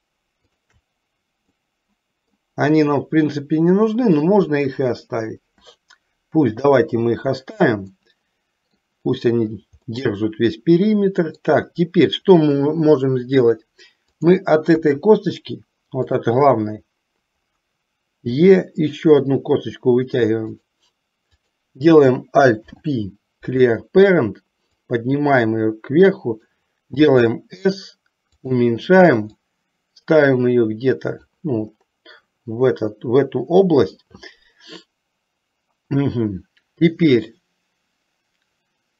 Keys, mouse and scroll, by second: 0.6 shift+click, 1.8 middle click, 6.8 KP_7, 8.1 middle click, 10.1-11.7 middle drag, 14.3 click, 15.0 KP_3, 16.2 click, 18.4 e, 22.7 alt+p, 25.1-26.6 drag, 27.0 s, 29.6-31.4 drag.